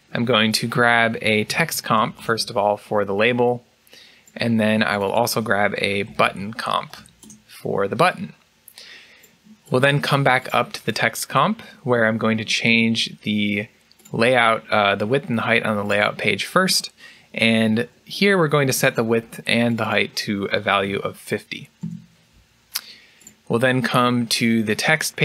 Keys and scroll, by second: 1.0-2.5 typing, 5.5-7.6 typing, 21.5-22.2 typing.